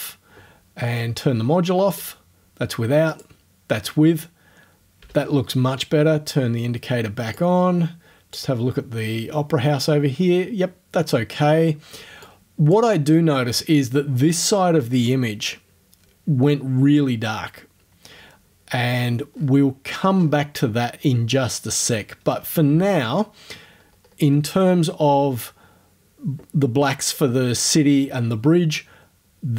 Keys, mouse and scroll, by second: 1.9 click, 3.1 click, 5.0 o, 7.4-8.5 drag, 12.3 click, 19.2-19.6 scroll down 2, 20.1-20.5 scroll down 2, 22.7 o, 23.8-24.3 scroll up 2, 24.3 scroll down 2.